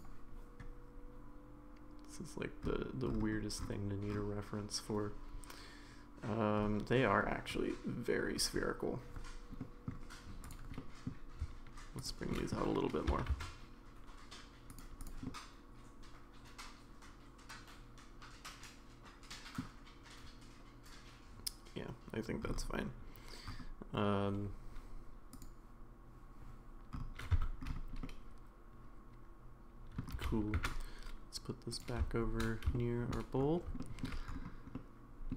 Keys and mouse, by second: 9.6 middle click, 10.4 click, 10.8 middle click, 12.3 middle click, 13.1 s, 15.2-19.6 middle drag, 27.3 Tab, 28.0-30.0 middle drag, 30.1 g, 32.7 shift+middle click, 33.8 shift+middle drag, 34.7-35.3 middle drag.